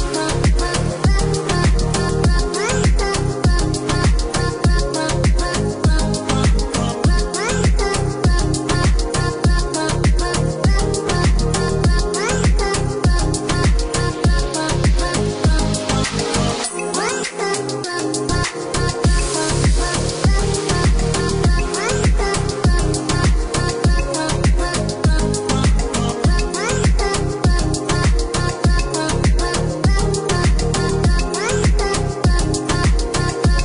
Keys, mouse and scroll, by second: 0.1 click, 0.8 KP_1, 1.1 KP_0, 1.3 KP_Enter, 2.9 Escape, 4.1 click, 6.1 click, 7.2 click, 8.0 click, 8.7 KP_2, 9.0 KP_8, 9.3 Return, 11.2 Escape, 12.2 Escape, 13.0 click, 17.4 click, 21.2-21.6 scroll down 1, 22.3 click, 25.6 click, 26.5 Escape, 27.1-27.5 scroll up 1, 28.5 click, 29.9 click, 32.9 click, 33.5 Escape.